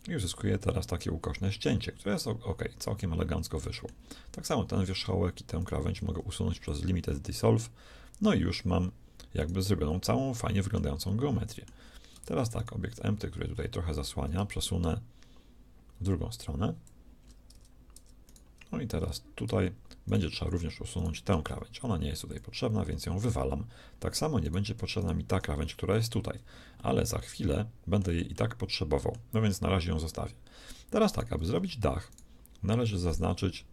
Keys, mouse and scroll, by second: 3.2 middle click, 4.4 click, 6.1 shift+x, 9.8-11.4 middle drag, 12.1 Tab, 14.8-16.8 drag, 17.6 Tab, 18.0 Tab, 18.8 Tab, 21.4 x, 27.0-30.3 middle drag, 30.3-31.0 scroll down 1, 31.0-32.9 middle drag.